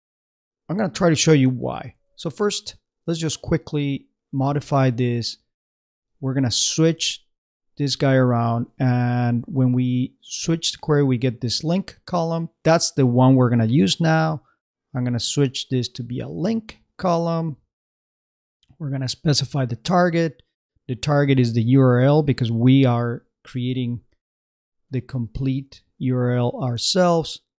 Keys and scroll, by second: 1.3 super+c, 1.9 super+Tab, 5.7 super+a, 5.9 super+v, 7.0 super+Tab, 23.2-25.1 typing, 25.6 shift+Tab.